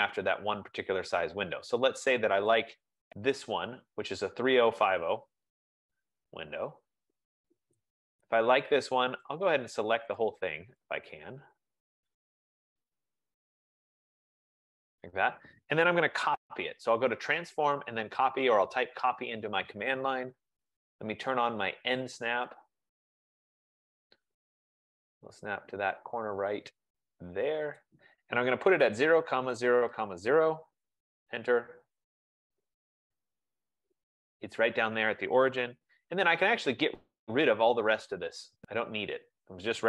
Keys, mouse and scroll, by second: 1.5 click, 2.7 click, 9.5 click, 10.3 click, 14.7 click, 17.3-18.7 typing, 19.8 click, 23.4 click, 26.2 F15, 27.1-27.6 scroll, 27.6 scroll, 28.0 click, 28.9-31.0 typing, 32.7-33.5 scroll, 33.5-34.5 scroll, 35.0 scroll, 35.9 Escape, 36.6 scroll, 39.0 click.